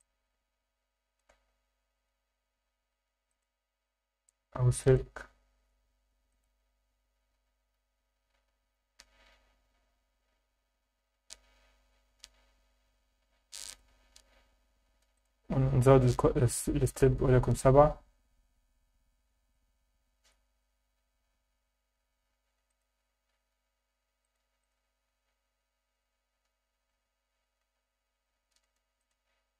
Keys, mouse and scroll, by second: 0.1-1.3 alt+middle drag, 1.5-3.0 scroll up 2, 3.4-5.4 drag, 6.4 click, 13.7-16.9 drag, 18.4-22.7 scroll down 10, 22.7 click, 23.0 scroll down 2, 24.2 click, 24.6 click, 26.3 scroll down 2, 27.0 scroll up 2, 28.6 right click.